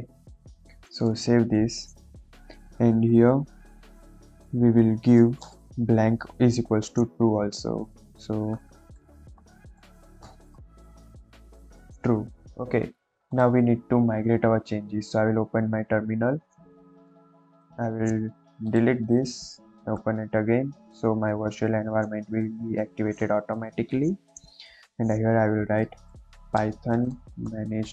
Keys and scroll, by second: 1.1 ctrl+s, 4.0 Left, 5.1 ,, 5.4 space, 8.6-9.7 typing, 10.1 Return, 10.8 shift+t, 11.0 r, 11.2 u, 11.4 e, 12.0 ctrl+s, 15.7 ctrl+`, 20.1 ctrl+`, 25.7-27.9 typing.